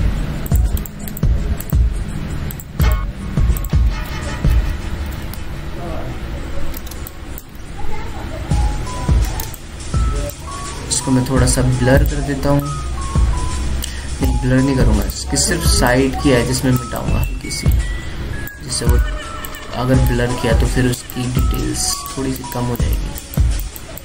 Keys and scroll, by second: 5.3 ctrl+d, 6.2 ctrl+alt+d, 7.8 ctrl+alt+space, 8.4 ctrl+alt+space, 10.3 ctrl+alt+space, 19.5 ctrl+z.